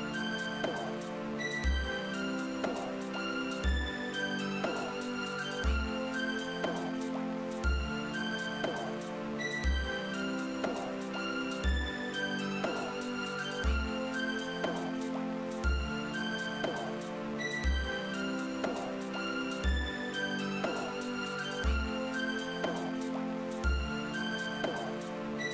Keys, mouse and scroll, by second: 5.1 click, 10.6 right click, 12.4-13.8 drag, 17.2 click, 18.1 click, 24.1 click.